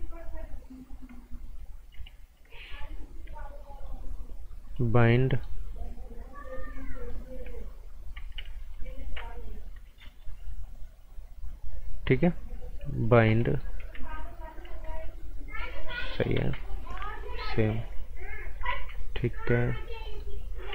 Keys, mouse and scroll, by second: 0.3-1.5 scroll down 1, 3.7 click, 5.1 scroll up 1, 5.3 right click, 6.5 click, 8.7 ctrl+shift+click, 10.2 ctrl+shift+click, 12.9 click, 13.2 scroll down 1, 13.4 right click, 13.9 z, 14.2-14.6 scroll down 1, 14.6 z, 14.9 click, 16.4 ctrl+z, 16.5 scroll up 1, 17.2 click, 18.7 ctrl+z, 19.0-19.4 scroll up 1, 20.0 right click.